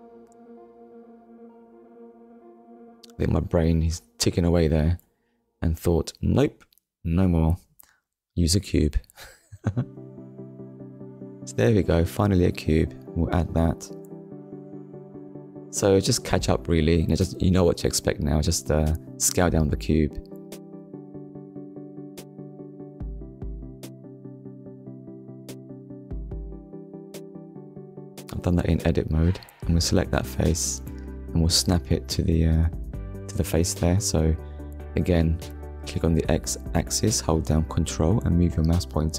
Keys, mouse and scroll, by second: 4.2 Delete, 5.3 middle click, 5.9 scroll down 1, 6.9 KP_1, 9.2 shift+a, 10.8 click, 11.6 scroll down 1, 13.0 click, 14.0 click, 16.2 click, 17.2 scroll up 1, 18.4 click, 21.1 Tab, 27.5 click, 29.6 click, 31.2 click, 31.9 scroll up 1, 34.0 click.